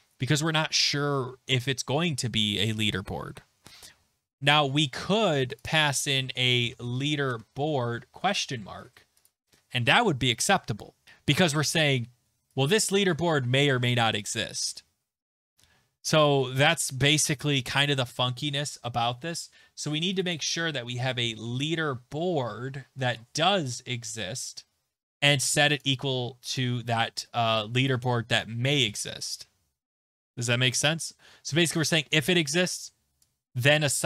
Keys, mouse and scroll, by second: 3.2 click, 5.6 click, 5.7 click, 6.3-8.5 typing, 9.2 click, 11.7 click, 13.1 click, 20.2 click, 20.3 click, 20.7-22.0 typing, 22.8 Return, 25.8 click, 26.6 click, 28.8 click, 32.5 click, 32.8 click.